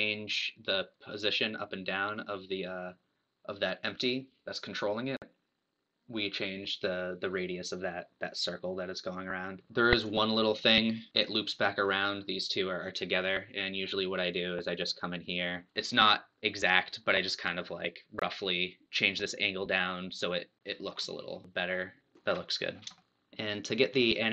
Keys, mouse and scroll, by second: 0.9 click, 3.0 click, 9.7 click, 10.5 scroll up 2, 11.0-13.3 middle drag, 13.7-14.4 scroll down 1, 14.4 click, 14.9-15.5 scroll up 2, 15.5 scroll down 1, 15.7-18.7 shift+drag, 21.0-21.3 scroll down 2, 21.3 middle click, 22.7 scroll down 1, 22.9 shift+middle click.